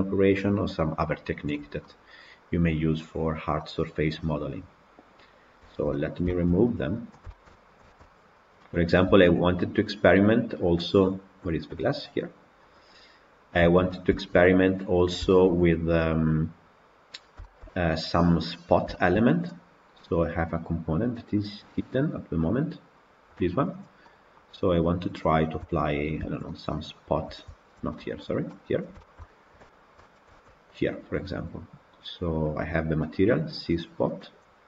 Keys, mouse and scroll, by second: 3.1-3.5 scroll down 2, 3.5-5.3 middle drag, 5.3-5.6 scroll down 3, 5.6-6.4 shift+middle drag, 6.4-7.0 scroll up 1, 7.0 click, 7.2-7.9 shift+middle drag, 7.9 Tab, 8.3 click, 9.2 shift+click, 11.6 click, 12.8 click, 13.7 Tab, 14.0-18.6 shift+middle drag, 18.6-19.3 scroll down 4, 18.8-19.2 shift+middle drag, 22.9 click, 23.6 click, 23.9 middle click, 24.9 click, 25.5 KP_Decimal, 26.3 Tab, 26.4 middle click, 27.2 Tab, 27.5-27.8 scroll down 4, 27.8-28.7 middle drag, 28.7 click, 29.0-29.9 shift+middle drag, 29.9-30.3 scroll up 1, 30.3 Tab, 30.6 click, 32.5 click, 34.3 click.